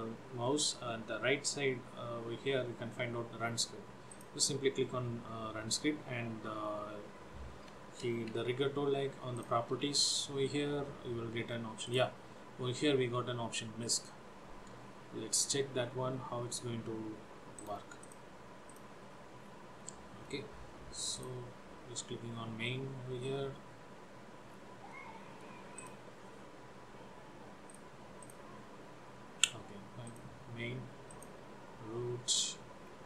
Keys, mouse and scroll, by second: 4.1 click, 9.4 click, 9.8 n, 12.0 click, 17.8 right click, 19.5-20.1 scroll down 3, 20.1 middle click, 21.3 click, 22.3 scroll up 1, 24.6 scroll down 2, 25.0 middle click, 25.9 click, 27.8 click, 28.4 click, 30.2 click, 31.2 click, 32.9-33.0 scroll down 1.